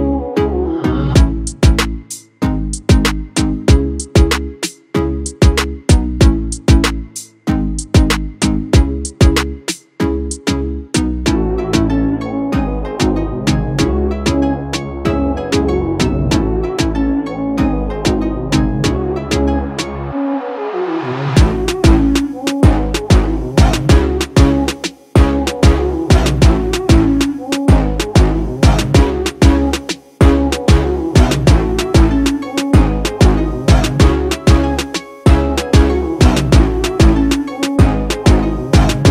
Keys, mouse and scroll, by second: 11.7 typing, 12.4-22.4 drag, 14.7-15.5 typing, 22.4 ctrl+t, 24.0-27.6 alt+drag, 30.8 click, 37.8 click.